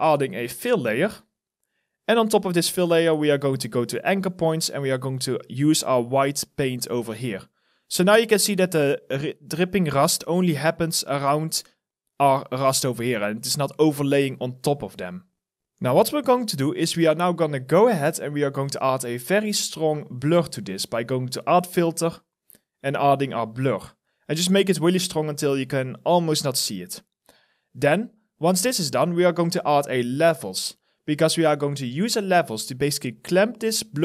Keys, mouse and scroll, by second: 6.8 alt+middle click, 7.4 alt+click, 8.4 alt+middle click, 8.9 alt+right click, 11.8 alt+middle click, 12.8 alt+click, 13.5 alt+middle click, 14.2 alt+click.